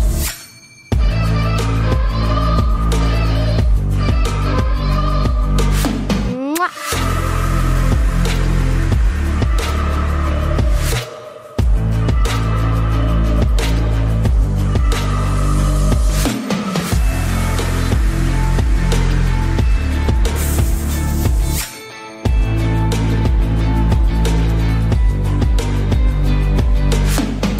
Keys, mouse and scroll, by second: 1.9-3.7 right drag, 3.7 middle click, 4.6 c, 5.1-6.3 drag, 8.9-10.6 right drag, 9.6 i, 10.6 click, 10.7 middle click, 11.3 z, 11.8-13.5 drag, 13.6 middle click, 14.4 ctrl+z, 15.0-16.6 middle drag, 16.2 ctrl+z, 16.8 middle click, 19.4 click, 19.6 KP_3, 20.0 z, 20.6 c, 26.7 right click, 26.8 z, 27.2 middle click, 27.2 right click, 27.3 click, 27.4 middle click.